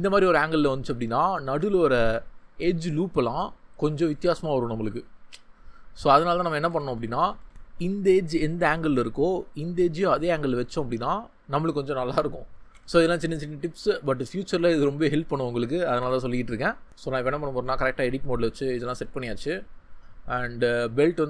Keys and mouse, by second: 4.5-5.8 drag, 6.0 ctrl+z, 6.4 ctrl+z, 6.6 ctrl+z, 6.7 ctrl+z, 9.9 click, 11.7 shift+click, 12.7 ctrl+z, 14.3-15.6 drag, 16.0 Tab, 19.1 ctrl+middle click, 19.5 middle click, 20.6 ctrl+middle click.